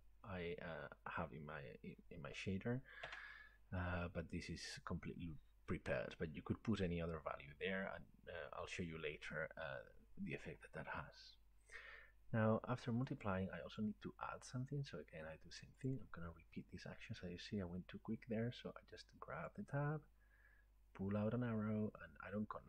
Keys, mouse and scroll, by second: 3.1 Tab, 13.9-21.0 drag.